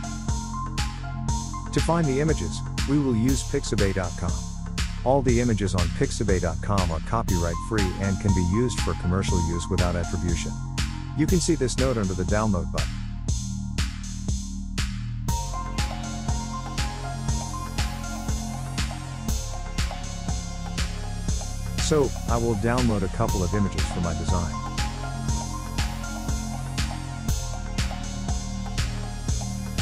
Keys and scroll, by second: 1.7 typing.